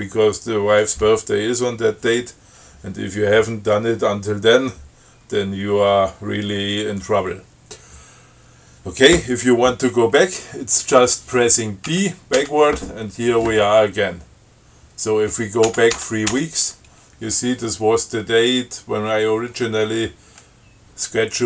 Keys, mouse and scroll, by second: 12.1 b, 15.9 b.